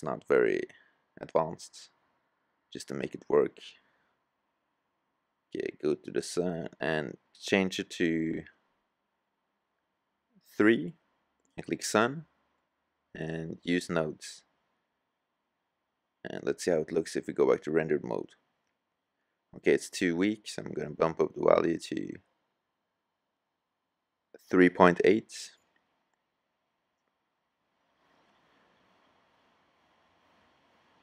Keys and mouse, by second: 0.2-1.4 drag, 1.4-2.0 middle drag, 4.1-9.1 right drag, 5.6-5.9 drag, 26.1 g, 30.4 KP_0.